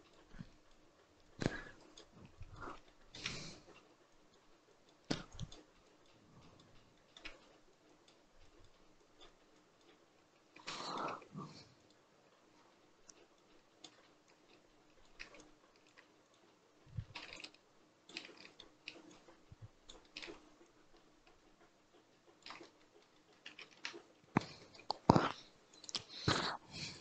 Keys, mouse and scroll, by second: 2.8-3.9 shift+middle drag, 3.9-6.8 drag, 6.8 shift+middle click, 7.7-10.6 drag, 10.6-11.7 shift+middle drag, 11.7-16.9 drag, 16.9 ctrl+z, 17.2-18.3 shift+drag, 18.3 shift+middle click, 19.0 shift+click, 19.9 shift+middle click, 20.5-22.5 shift+drag, 22.5 scroll down 3, 22.7-25.7 shift+middle drag, 25.7-27.0 drag.